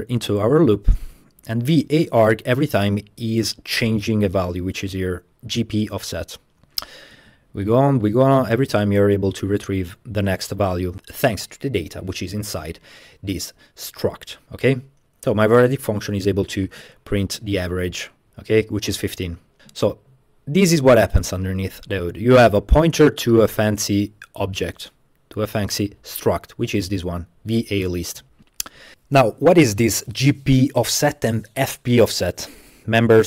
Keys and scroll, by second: 0.2 space, 1.9 space, 7.2-10.3 typing.